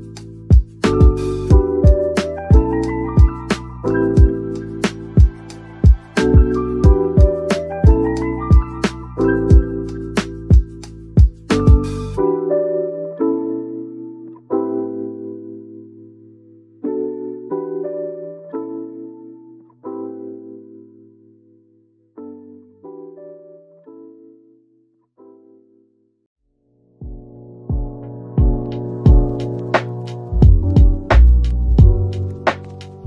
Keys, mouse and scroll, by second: 0.3-3.2 typing, 1.4-1.9 scroll down 1, 4.1-4.7 scroll up 2, 4.4-5.2 typing, 6.3 middle click, 7.3-7.6 typing, 8.4-9.2 scroll down 1, 8.9-10.1 typing, 10.9 middle click, 11.8-12.8 typing, 13.1 middle click, 14.0-14.5 typing, 17.0-17.9 typing, 18.8 middle click, 19.8 typing, 21.2 middle click, 23.4 a, 26.7 middle click, 28.2-28.6 typing, 30.3 middle click, 31.3-31.7 typing.